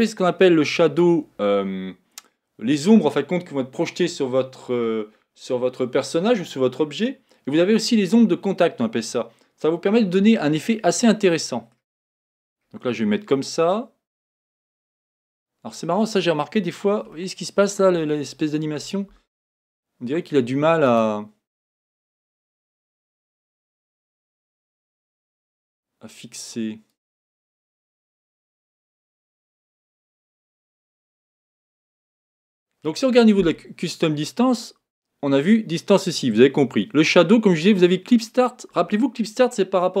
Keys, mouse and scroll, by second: 11.1 middle click, 12.0-14.6 scroll up 9, 14.6-15.9 middle drag, 15.9-16.6 scroll down 1, 17.3-20.3 shift+middle drag, 20.9 click, 22.1-24.2 drag, 25.5-40.0 drag.